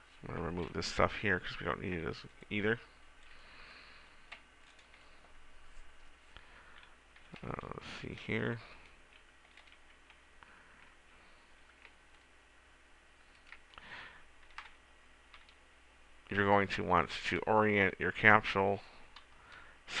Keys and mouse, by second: 0.2 right click, 1.4 Delete, 10.6 r, 15.1 KP_0, 15.1 KP_1, 15.8 KP_1.